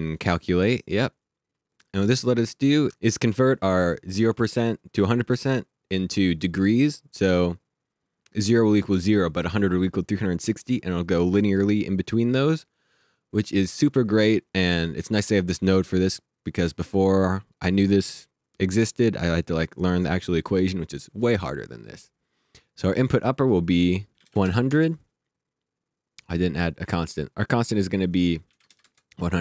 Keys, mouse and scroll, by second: 1.2 click, 22.6 click, 24.2 KP_1, 24.7 KP_Enter, 26.2 click, 28.4 KP_1, 28.8 KP_Enter.